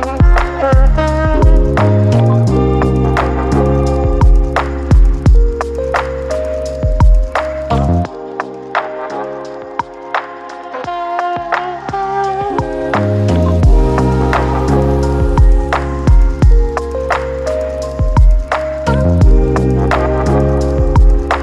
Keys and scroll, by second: 3.3 j, 3.5-4.3 j, 7.0 ctrl+d, 8.3 typing, 9.3 ctrl+d.